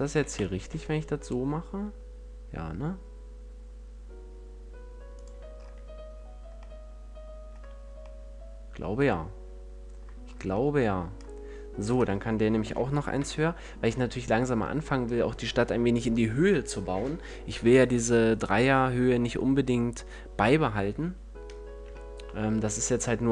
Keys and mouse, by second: 0.0 e, 5.1-7.0 drag, 7.0-9.8 middle drag, 7.6 a, 12.5 ctrl+l, 13.0 KP_1.